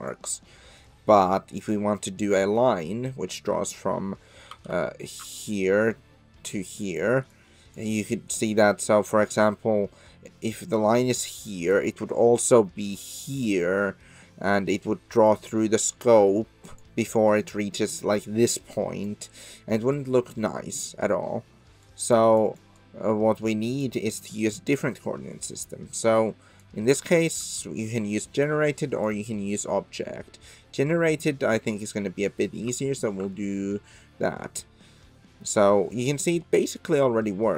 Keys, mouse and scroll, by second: 0.0 click, 0.8-2.6 middle drag, 4.6 d, 5.3-24.0 d, 5.5-7.0 drag, 7.3 click, 11.1 click, 12.5 click, 15.3-16.8 drag, 17.8-19.0 drag, 20.0 click, 21.8-22.4 drag, 22.8-23.8 drag, 26.2-26.7 drag, 28.6-29.1 drag, 30.9 click, 32.8 shift+middle drag, 33.3-34.9 middle drag, 34.9 click, 35.0 middle drag, 35.1 click, 35.2 middle drag, 35.3 click, 35.4 middle drag, 35.5 click, 35.6-36.6 middle drag, 36.6 click, 36.7 middle click, 36.8 click, 37.1 click, 37.2-37.5 middle drag.